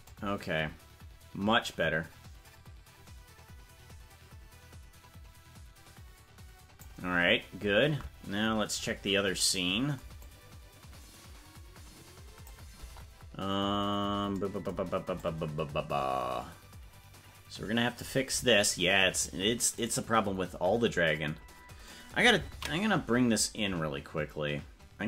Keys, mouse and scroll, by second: 0.1-7.0 drag, 9.5 scroll down 10, 10.3-12.6 drag, 12.7 KP_0, 15.2-18.1 drag, 19.2 right click, 19.9 right click.